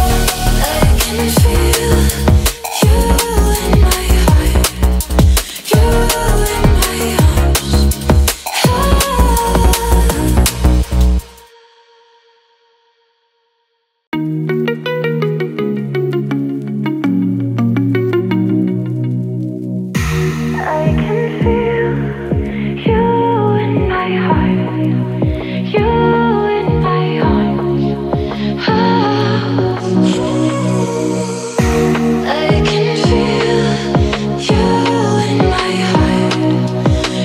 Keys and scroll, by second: 23.4 Delete, 27.0 Delete.